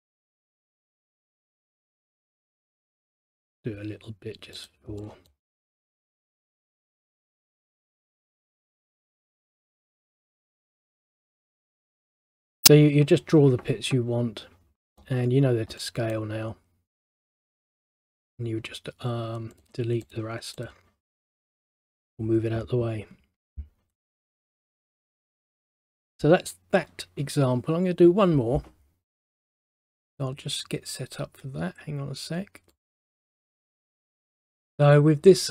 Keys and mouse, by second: 1.4 click, 2.5 click, 4.7 click, 5.1 middle click, 9.5 click, 9.9 right click, 10.4 click, 11.7 middle click, 15.9 middle click, 17.8 click, 18.4 right click, 19.6 click, 20.1 click, 20.7 click, 23.3 ctrl+z, 24.6 middle click, 32.8 click, 33.0 click.